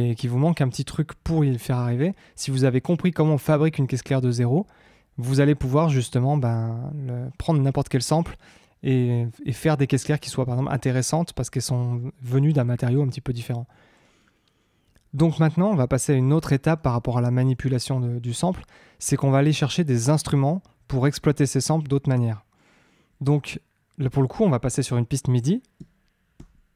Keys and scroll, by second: 26.3 shift+super+t.